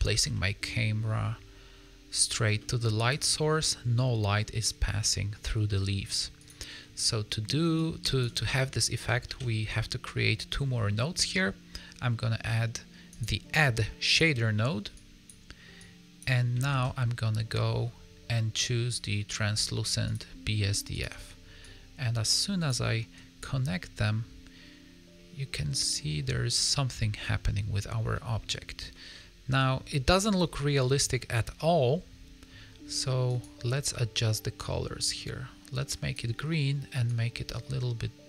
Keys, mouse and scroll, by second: 0.0 a, 0.3 middle click, 2.1 click, 2.5 middle click, 2.9 click, 3.3 middle click, 4.6 middle click, 5.6 middle click, 6.4 click, 7.7 click, 8.4 middle click, 8.6-9.0 scroll up 2, 9.2 shift+a, 14.9 click, 15.7 click, 16.6 shift+a, 21.5 click, 23.7 middle click, 27.4 scroll down 1, 27.7-28.1 scroll up 3, 28.1 middle click, 29.1 middle click, 29.7 scroll down 3, 29.8 middle click, 31.0 scroll up 2, 31.3 middle click, 33.2 click.